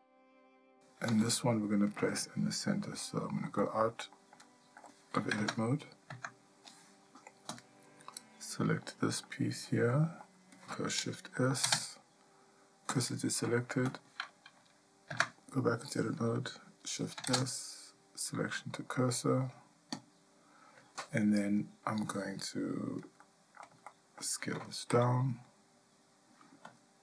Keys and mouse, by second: 1.1 g, 3.1 shift+middle click, 3.6 middle click, 4.5 shift+middle click, 5.4 Tab, 6.1 Tab, 9.3-9.7 shift+middle drag, 9.9-10.2 middle drag, 11.6 shift+s, 15.1 Tab, 17.3 shift+s, 21.5 click, 23.2 shift+middle click, 23.9 ctrl+middle click.